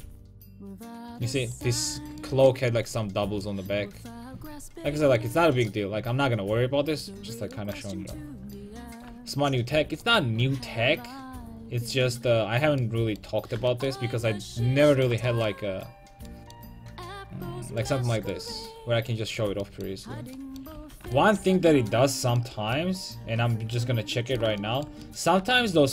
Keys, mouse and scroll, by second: 1.6-3.5 right drag, 1.9 Tab, 5.4 a, 10.9 middle click, 11.7-16.2 middle drag, 16.5-17.8 middle drag, 20.8 a.